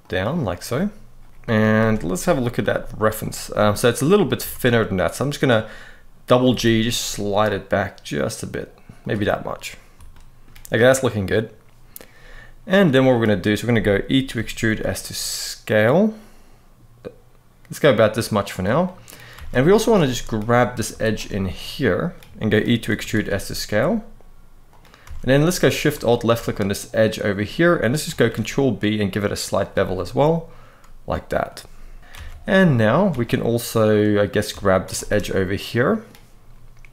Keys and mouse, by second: 1.5 Tab, 2.3 g, 2.9 click, 4.0 click, 4.1 Tab, 6.2 g, 6.3 g, 9.8 shift+middle click, 12.5 middle click, 14.1 e, 14.4 s, 18.5 middle click, 19.1 alt+a, 19.3 middle click, 19.8 shift+middle click, 20.7 alt+shift+click, 21.1 middle click, 22.1 shift+middle click, 22.6 e, 22.9 s, 24.4 click, 24.8 alt+a, 25.8 alt+shift+click, 26.2 middle click, 27.4 middle click, 28.0 ctrl+b, 29.8-31.2 middle drag, 32.1 middle click, 32.8 alt+a, 33.7 middle click, 35.0 middle click.